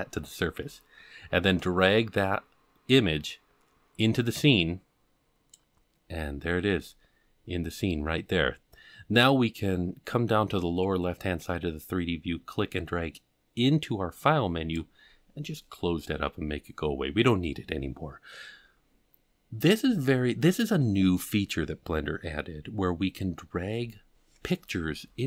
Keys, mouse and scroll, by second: 1.6-5.5 drag, 6.3-7.1 scroll up 1, 7.1-7.4 scroll up 8, 12.5-15.5 drag.